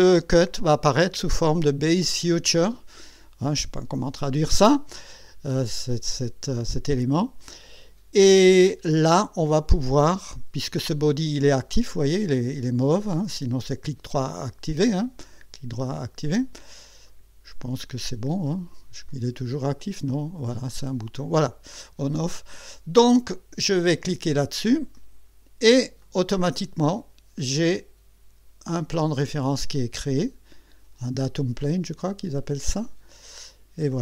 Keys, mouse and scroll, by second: 10.5 click, 13.2 click, 15.2 right click, 17.1 click, 18.5 click, 19.1 click, 20.1 right click, 20.7 click, 24.9 click, 26.0-29.4 drag, 29.6-33.9 drag.